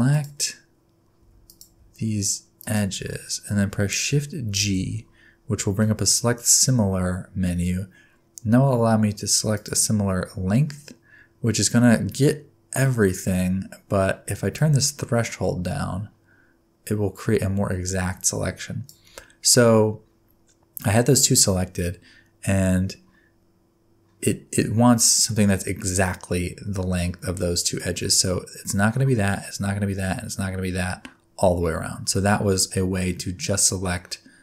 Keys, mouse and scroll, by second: 0.1 click, 1.2 2, 1.5 click, 2.6 shift+click, 4.6 shift+g, 14.5 click, 19.7-23.0 scroll up 3, 32.5-34.4 scroll down 2.